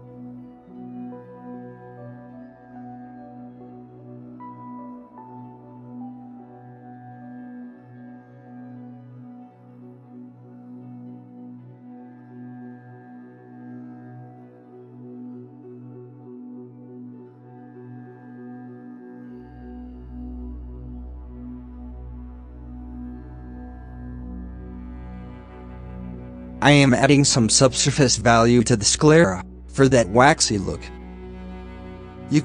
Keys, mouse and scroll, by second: 0.1-1.4 scroll down 2, 1.5 scroll down 8, 3.1-3.8 middle drag, 3.8 scroll down 2, 4.2 middle click, 4.4-4.8 scroll up 1, 4.8-5.1 drag, 5.1 middle drag, 5.3 KP_Decimal, 5.8 KP_5, 6.2-6.9 scroll up 2, 6.5 shift+middle drag, 6.9-7.5 middle drag, 7.5 shift+scroll up 1, 8.6 middle drag, 8.9 scroll up 2, 9.3-11.0 shift+middle drag, 11.0 scroll up 2, 14.5 scroll down 4, 14.8 middle click, 15.0-15.9 scroll up 7, 15.2 middle click, 15.9 click, 16.6 KP_0, 18.6-19.1 middle drag, 19.1 scroll down 6, 19.4-21.3 middle drag, 21.3-24.3 scroll down 3, 24.6 middle click, 24.8-25.3 scroll up 2, 25.3-27.8 drag, 27.8-28.8 scroll up 5, 28.8-32.4 drag.